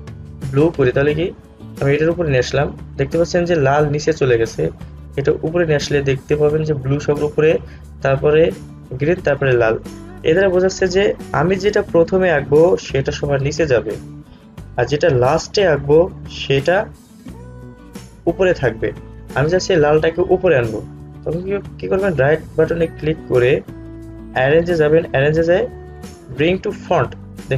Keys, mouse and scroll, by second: 10.8-19.3 drag, 22.3 right click, 27.0 click.